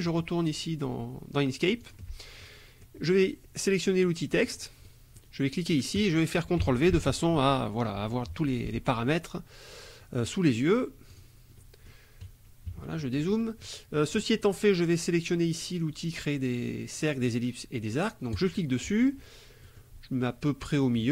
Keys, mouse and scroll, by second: 1.8 alt+click, 2.4 alt+click, 2.6 middle click, 4.5 click, 4.9 middle click, 6.0 click, 6.9 ctrl+v, 11.1 click, 11.6 click, 12.7 KP_Subtract, 13.4 click, 18.4 click, 19.6 click.